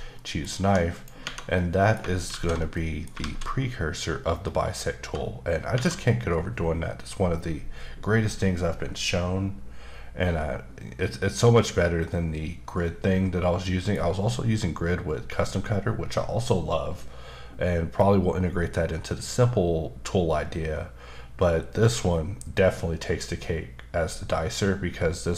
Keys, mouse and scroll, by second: 0.1 middle click, 0.6 1, 0.9 click, 1.2 Tab, 1.5 middle click, 2.3 alt+z, 2.7 middle click, 3.2 alt+z, 4.3-4.7 scroll up 1, 4.8-5.3 scroll down 2, 5.7 Tab, 11.0 middle click.